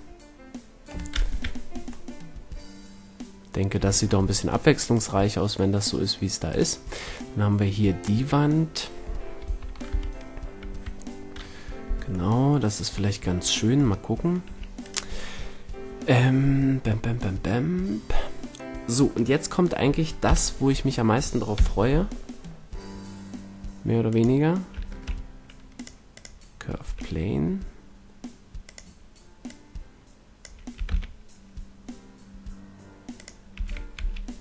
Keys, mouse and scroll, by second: 1.2 KP_5, 3.7 a, 6.3-8.8 middle drag, 9.4 KP_3, 9.8 KP_1, 10.6 KP_2, 14.4 a, 20.2 KP_7, 21.4 KP_5, 24.0-24.8 drag, 24.8 shift+a, 26.7 s, 28.7-31.3 drag, 30.6 s, 33.2 click, 33.4 s.